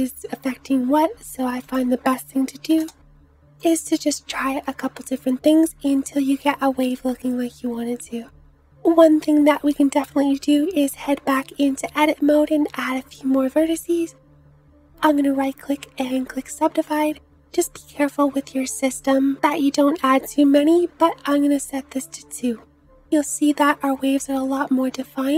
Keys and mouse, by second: 4.3 space, 6.5 space, 9.6 Tab, 22.3 Tab, 23.6 space.